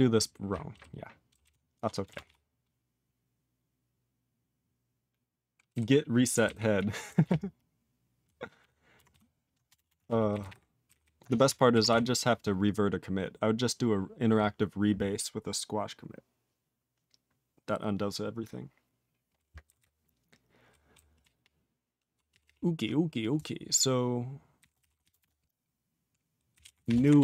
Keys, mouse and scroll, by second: 1.3 ctrl+n, 1.4 ctrl+n, 1.7 ctrl+e, 2.0 ctrl+space, 2.0 ctrl+a, 2.1 ctrl+p, 2.2 ctrl+p, 5.7 ctrl+g, 6.3 ctrl+n, 6.4 ctrl+n, 6.5 ctrl+e, 6.7 ctrl+e, 7.2 ctrl+s, 7.2-8.2 ctrl+p, 8.5 ctrl+p, 9.1 ctrl+s, 9.6 Return, 9.8 Return, 9.9 ctrl+a, 10.0 ctrl+p, 10.3 ctrl+n, 10.3 ctrl+k, 10.4 ctrl+p, 10.8 ctrl+o, 10.9 ctrl+n, 11.2 Tab, 11.9 ctrl+s, 15.4 ctrl+s, 19.6 ctrl+n, 19.7-20.7 ctrl+n, 20.9 ctrl+n, 21.2-22.1 ctrl+p, 22.3 ctrl+p, 22.4 ctrl+p, 24.3-27.2 typing.